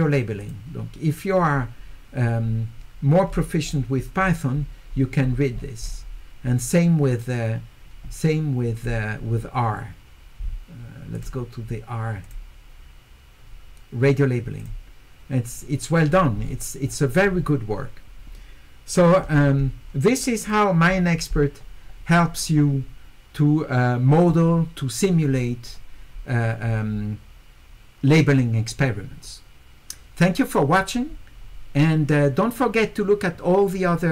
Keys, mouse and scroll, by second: 0.4 click, 3.3 middle click, 3.3-3.8 scroll up 4, 3.6 middle click, 4.2-4.6 scroll up 2, 5.4 scroll up 4, 8.8 click, 11.1 click, 12.2 click, 14.6 click, 16.4 scroll down 2, 16.9-19.2 scroll up 4, 20.4 click.